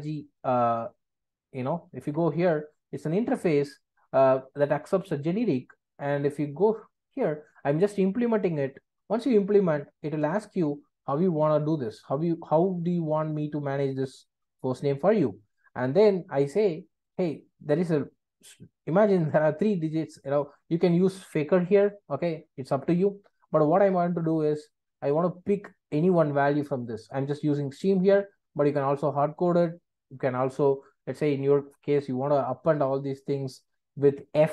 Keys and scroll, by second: 2.0 super+b.